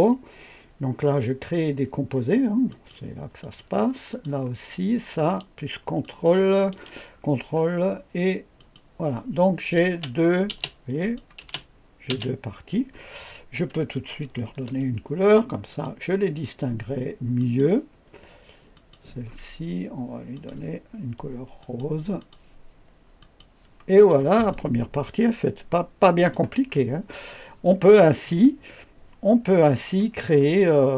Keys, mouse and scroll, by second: 2.7 click, 3.4 click, 4.1 click, 4.4 click, 6.0 ctrl+click, 8.5 click, 9.5 click, 9.9 space, 10.5 space, 11.0 click, 11.4 space, 12.1 space, 12.9-14.1 scroll down 1, 14.5 ctrl+d, 15.7 click, 17.4 click, 18.7 click, 20.3 click, 21.6 click, 22.2 click, 23.2 click, 23.9 click, 24.5-26.3 drag, 26.7-27.7 scroll up 1, 28.1-29.9 drag, 30.4-30.9 scroll up 1.